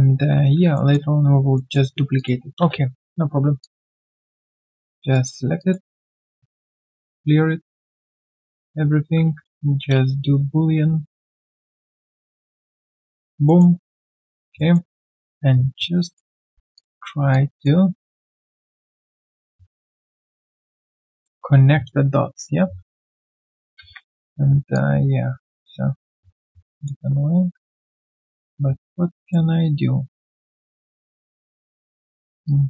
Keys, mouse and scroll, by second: 0.7 alt+middle click, 1.9 alt+middle click, 2.6 space, 3.6 alt+click, 3.9 alt+right click, 4.4 alt+middle click, 5.0 alt+click, 5.3 alt+scroll down 1, 5.6 alt+click, 8.5 double click, 9.9 space, 13.4 alt+middle click, 13.7 alt+right click, 13.9 alt+click, 14.2 alt+right click, 14.4 alt+click, 14.7 alt+middle click, 15.1 alt+click, 15.5 right click, 15.5 q, 16.9 typing, 17.3 alt+click, 19.3 alt+middle click, 19.7 alt+click, 22.6 ctrl+shift+q, 23.0 ctrl+z, 23.8 ctrl+z, 32.4 alt+click.